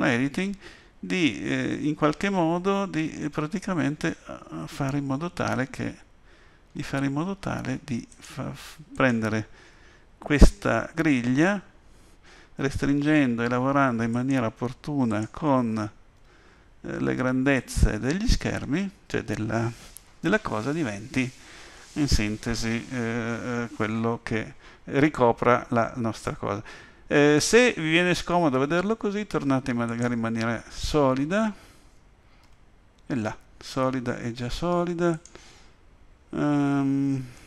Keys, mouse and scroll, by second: 0.2 g, 8.9 click, 10.3 g, 15.1 click, 16.2 g, 28.5 z, 32.4 z, 37.3 middle click.